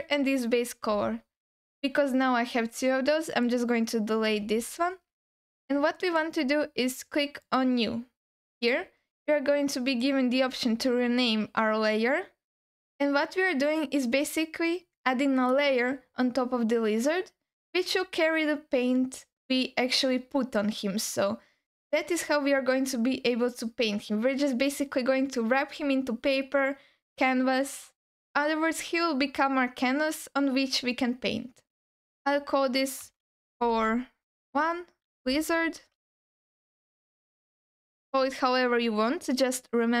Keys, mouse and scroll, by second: 3.3 click, 4.6 x, 5.6 alt+middle click, 7.4-40.0 drag, 35.9 BackSpace, 36.1 BackSpace.